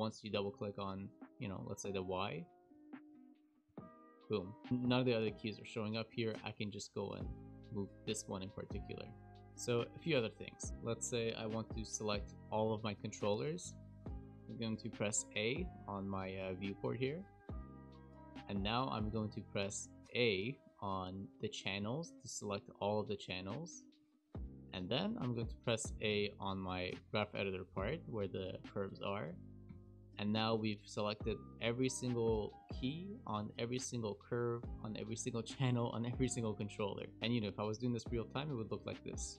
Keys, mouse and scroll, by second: 0.1 click, 0.2 click, 1.0 click, 1.2 click, 2.2 click, 2.6 click, 3.6 g, 5.9 click, 6.5 click, 7.1 g, 9.3 shift+middle click, 9.3 click, 9.3 `, 10.7 click, 17.1 a, 21.7 a, 28.5 shift+middle click, 29.0 shift+middle click, 29.7 a, 37.1 click, 37.1 a, 38.9 a.